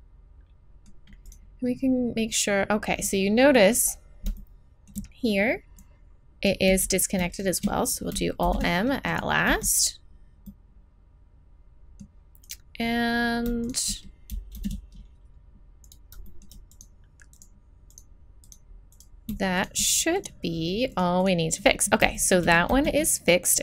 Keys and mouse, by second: 1.3 right click, 5.1 click, 5.8-7.3 right drag, 6.7 z, 7.6 click, 8.4 alt+m, 9.5 z, 14.6 alt+m, 16.3-18.0 drag, 22.7 z.